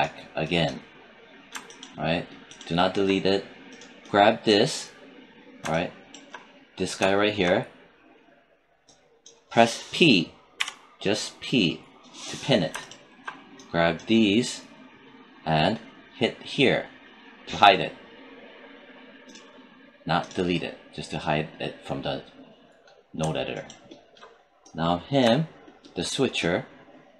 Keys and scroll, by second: 10.4 p.